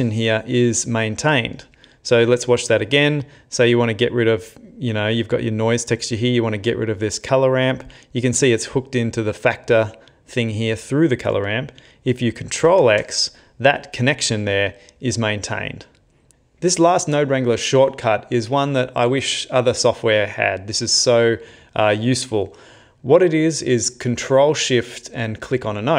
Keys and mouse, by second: 1.9 middle click, 2.8 middle click, 5.3 click, 6.2 click, 7.2 click, 10.4 click, 12.7 ctrl+x.